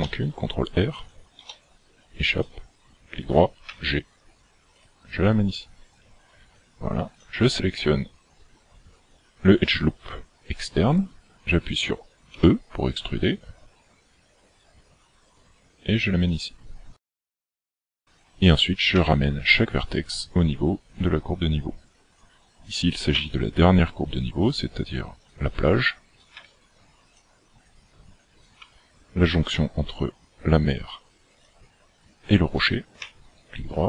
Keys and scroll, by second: 0.0 ctrl+r, 3.7 g, 12.3 e, 18.9 g, 23.2 g, 26.4 g, 28.6 g, 33.0 g.